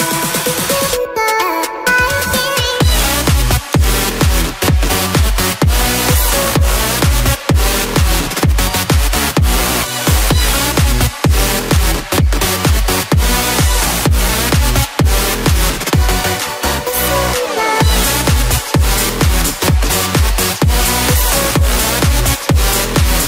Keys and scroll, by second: 1.2 ctrl+t, 7.0 Return, 21.9 ctrl+alt+shift+e.